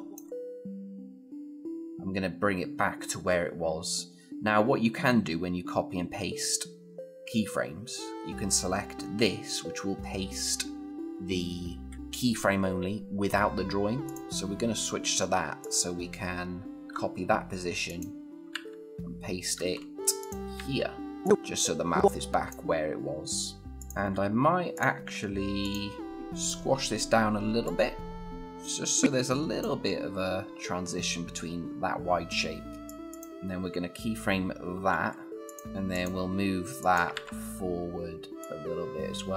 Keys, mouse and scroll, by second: 13.8 click, 16.7 ctrl+c, 17.7 click, 18.3 ctrl+v, 19.4 ctrl+z, 20.0 click, 20.4 ctrl+v, 21.0-22.6 click, 32.7-33.1 click, 34.5 F6, 35.3 click, 36.9 ctrl+v, 38.2-39.3 click.